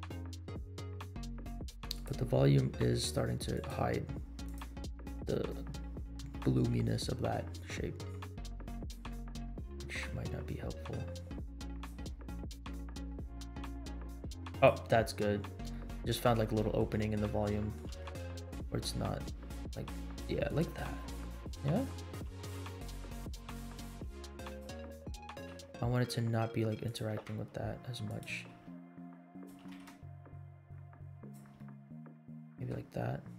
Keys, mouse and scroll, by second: 0.1 scroll down 1, 1.2 scroll down 2, 2.0 click, 3.5-3.9 drag, 4.6 click, 5.6-6.3 scroll down 2, 6.3 middle click, 6.9-7.3 scroll down 1, 8.8 click, 9.5 middle click, 10.2 g, 12.6 r, 15.7 middle click, 16.5 shift+middle click, 17.2 middle click, 17.9 g, 21.3 scroll down 1, 22.2 g, 23.9 r, 24.6 g, 25.1 g, 27.1 g, 28.5 r, 29.5 g, 31.6-32.7 middle drag, 33.0 scroll down 1.